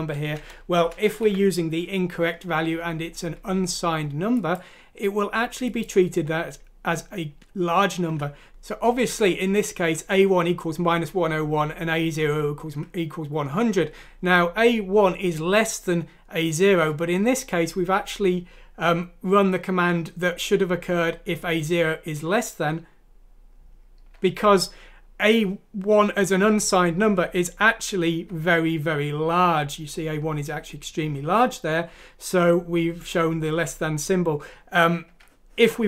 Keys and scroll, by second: 0.4 Left, 8.0 F6.